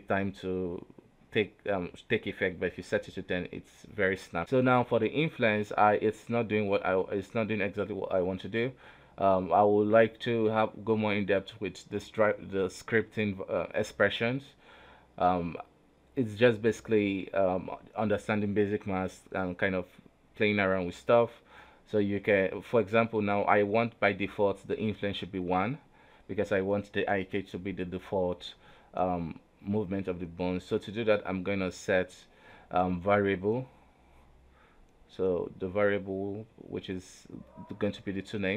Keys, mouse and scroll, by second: 0.1 right click, 1.3 click, 2.1-4.4 drag, 4.4 right click, 5.1-5.9 scroll up 1, 5.9-6.8 scroll up 1, 7.4 right click, 7.8 right click, 7.9 g, 9.4 space, 10.1 click, 10.8 ctrl+z, 11.3 right click, 11.7-13.5 middle drag, 13.5-16.7 right drag.